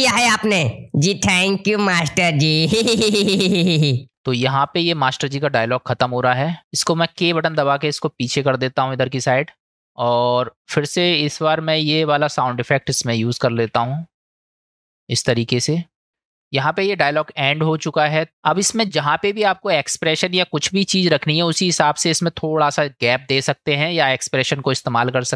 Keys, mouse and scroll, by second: 4.2-6.6 drag, 7.5 k, 8.2 click, 12.6 click, 13.6 shift+d, 16.5-18.1 drag.